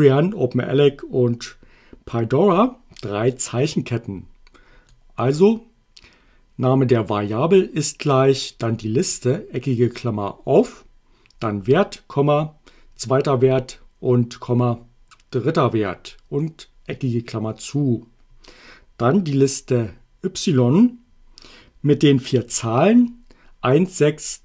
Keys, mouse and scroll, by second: 4.9 click, 9.1 click.